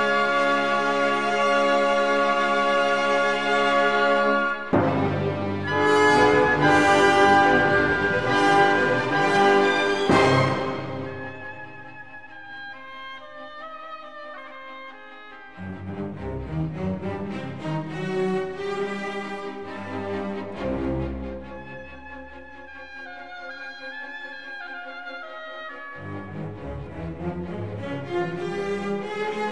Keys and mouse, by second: 3.0 Tab, 3.2 click, 4.8 click, 5.3 Tab, 6.2 a, 6.7 KP_3, 7.5 s, 8.4 y, 12.1 click, 14.6 click, 15.9 Tab, 16.7 click, 17.1 click, 17.5 Tab, 18.6 ctrl+r, 19.1 click, 20.0 click, 22.9 s, 23.9 y, 25.4 click, 26.7-28.5 drag.